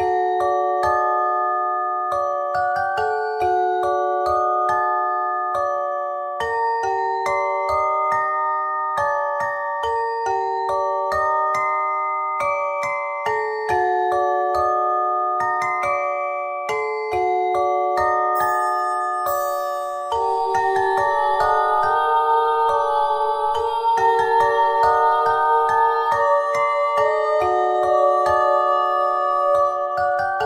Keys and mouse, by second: 0.1 ctrl+z, 0.9 w, 4.3 ctrl+Tab, 5.7 w, 6.9 x, 7.7 ctrl+Tab, 10.3 w, 11.4-12.7 drag, 12.7 middle click, 17.8 f, 18.9 KP_1, 20.4 e, 23.6 e, 24.3 r, 26.4 z, 29.3 s.